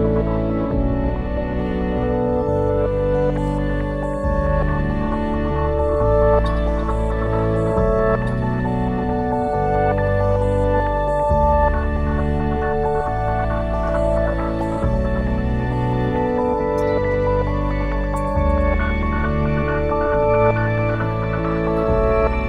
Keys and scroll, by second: 0.4 ctrl+s, 4.8 ctrl+s, 8.5 ctrl+s, 15.5-17.4 typing, 17.5 Return.